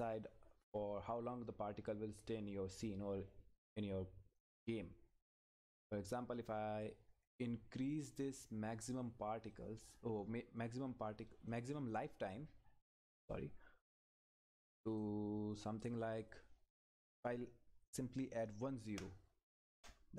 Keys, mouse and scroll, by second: 0.3 scroll up 1, 1.3 click, 1.9 scroll up 1, 2.2 click, 4.4 click, 14.8 click, 19.7 Return.